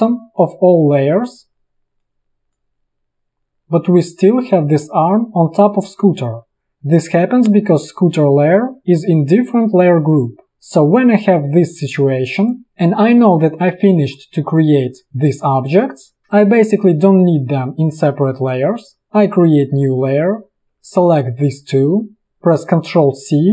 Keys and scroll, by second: 23.2 ctrl+c.